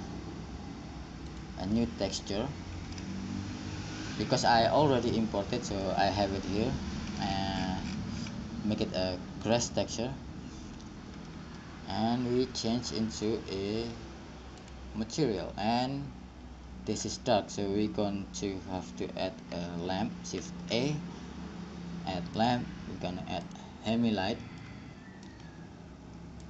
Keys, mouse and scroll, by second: 11.4 middle click, 11.5-13.0 drag, 13.0 middle click, 13.3-15.2 drag, 20.6 shift+a.